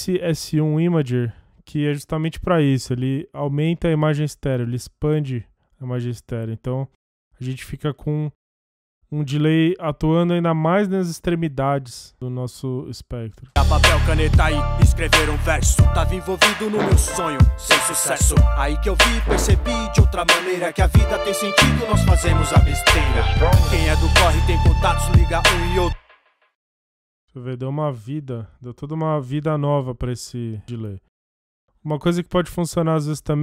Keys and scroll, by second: 13.4 space, 25.9 space.